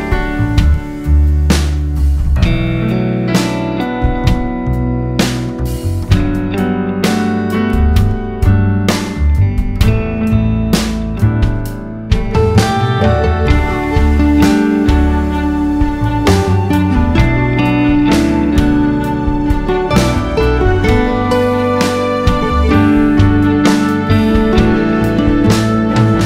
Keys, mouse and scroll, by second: 0.6 click, 1.2 scroll up 1, 1.5 scroll down 1, 2.6 scroll down 1, 2.8-3.4 scroll up 1, 5.6 right click, 5.8 alt+a, 6.0 `, 6.6 KP_0, 8.6-12.2 drag, 11.2 alt+a, 13.0 g, 14.6 click, 16.5 scroll down 2, 16.7-17.2 drag, 17.2 g, 17.5 right click, 17.8 click, 18.5 drag, 19.2 KP_0, 19.8 g, 22.0 click, 22.2 g, 24.6 click, 25.0 g.